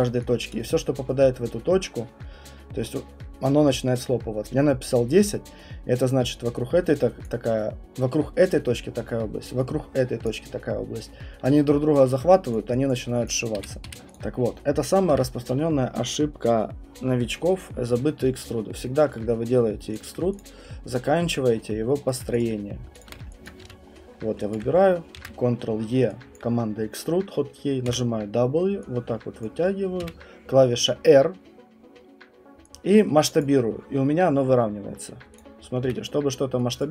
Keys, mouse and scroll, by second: 0.5 click, 0.9 ctrl+click, 0.9 Return, 2.9 ctrl+z, 4.4 Print, 7.2 click, 10.2 ctrl+click, 12.2 ctrl+click, 12.5 click, 12.9 click, 13.2 click, 13.6 Escape, 13.8 Escape, 13.9 click, 13.9 right click, 14.1 click, 15.1 Delete, 18.2 alt+middle click, 19.0-20.0 alt+middle click, 19.1 middle click, 19.3 middle click, 19.6 middle click, 19.8 middle click, 20.0 alt+click, 20.4 click, 20.6 middle click, 20.6 middle click, 21.2 alt+middle click, 22.1 right click, 22.4 click, 23.4 alt+click, 23.6 f, 23.9-24.3 scroll, 24.5 alt+click, 25.2 ctrl+e, 25.2 middle click, 27.8 w, 29.4 click, 30.0 r, 33.4 click, 33.6 middle click, 34.4 middle click, 35.4 click, 35.6 middle click, 35.6 middle click, 35.8 w, 36.8 click.